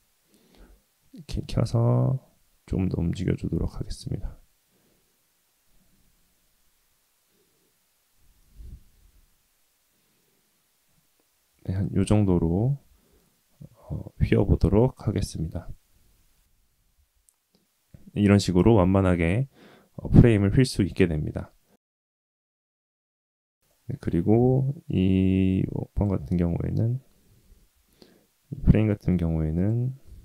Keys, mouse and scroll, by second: 0.5 g, 7.5 y, 12.8 Tab, 13.5 Tab, 17.0 Tab, 21.7-22.5 middle drag, 22.6-22.9 scroll down 2, 22.9-23.5 scroll up 3, 23.6-24.0 shift+middle drag, 24.5 middle click, 25.9 click, 26.3 scroll up 1, 26.4 middle drag, 27.7 `, 29.1 Tab, 29.5 click.